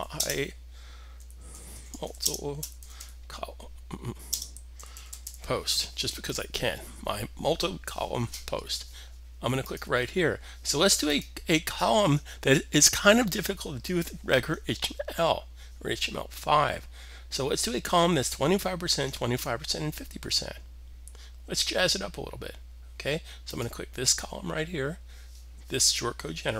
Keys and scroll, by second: 0.0-5.6 typing.